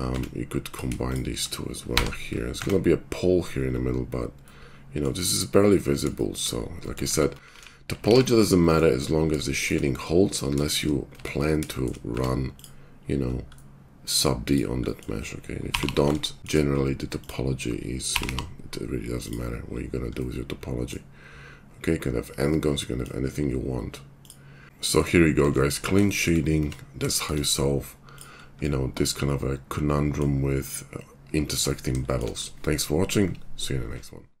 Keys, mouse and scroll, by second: 0.1 Tab, 1.8 j, 2.5 Tab, 3.6-4.8 middle drag, 5.5 middle click, 6.1 shift+middle click, 6.4 middle click, 6.9 middle click, 7.1 Tab, 7.5 alt+x, 8.1 alt+x, 9.0 middle click, 9.4-12.5 shift+middle drag, 11.2 Tab, 12.1 Tab, 12.6-13.6 middle drag, 13.6 click, 15.7 g, 18.0 g, 19.6-24.1 middle drag, 24.1 click, 24.2 middle click, 24.9-29.6 shift+middle drag, 26.5 Tab, 29.6 click, 30.3-34.4 middle drag, 31.4 Tab.